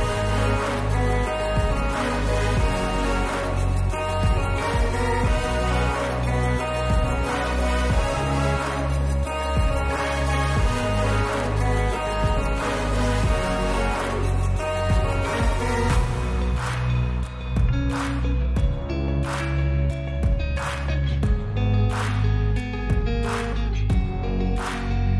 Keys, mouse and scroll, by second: 24.4 click.